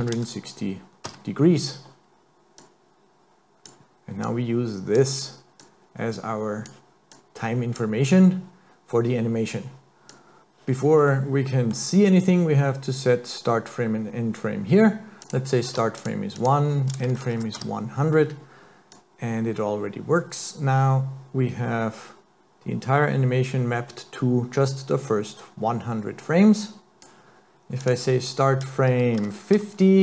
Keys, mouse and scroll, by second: 2.6 click, 4.2 click, 5.6 click, 7.1 click, 10.1 click, 11.1 middle click, 15.2 click, 16.4 click, 17.3 KP_0, 18.9 click, 27.8 click.